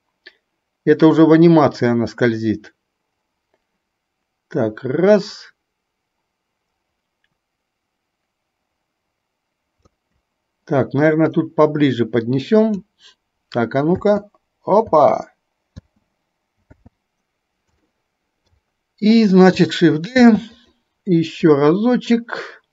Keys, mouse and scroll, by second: 11.6-13.1 drag, 14.1 space, 15.1 space, 15.8 space, 16.8 space, 18.1-18.8 shift+middle drag, 20.4 shift+d, 21.7-22.7 drag.